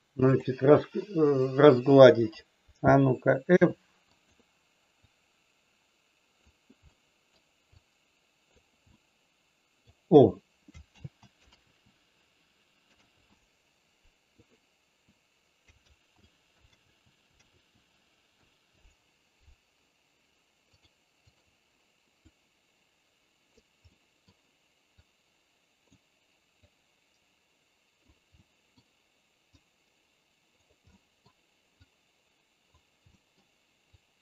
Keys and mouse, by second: 5.1-6.3 drag, 6.8 middle click, 7.7 click, 9.0 middle click, 11.0 ctrl+z, 11.5 ctrl+z, 15.8 ctrl+z, 16.7 ctrl+z, 17.6 ctrl+z, 20.7 click, 21.2 click, 22.2-23.6 drag, 23.8 middle click, 25.0 click, 26.7-28.1 drag, 28.3 middle click, 29.5-30.6 drag, 30.8 middle click, 31.8 click, 33.1 middle click, 34.0 click.